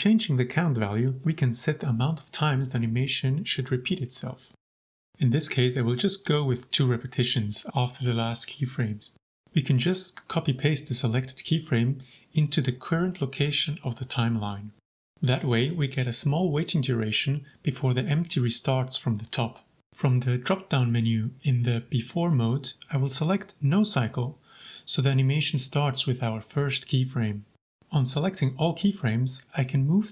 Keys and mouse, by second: 1.1 click, 4.9-7.8 drag, 8.3 right click, 9.0-10.8 drag, 12.0 ctrl+c, 12.9 ctrl+v, 13.7-16.1 drag, 16.9 shift+click, 17.5 ctrl+s, 19.5-27.0 drag, 29.2-30.1 typing.